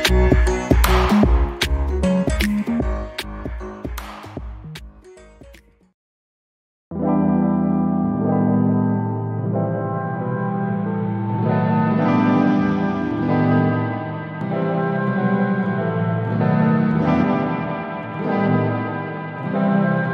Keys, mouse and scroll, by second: 7.2-8.1 scroll down 1, 8.1 click, 9.6-9.9 scroll down 1, 9.9 alt+middle click, 10.5 alt+click, 10.9 scroll up 1, 11.9 ctrl+click, 13.9 ctrl+z, 14.6 ctrl+click, 18.0-19.0 scroll down 1, 19.0 alt+middle click, 19.5 alt+click, 20.0 alt+middle click.